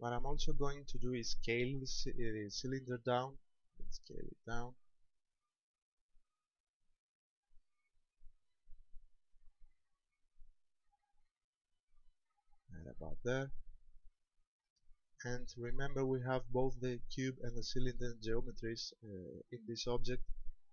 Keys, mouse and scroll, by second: 2.9 s, 12.8 ctrl+click, 13.3 scroll up 4, 14.2 shift+middle click, 15.0 middle click, 15.8-16.1 scroll up 3.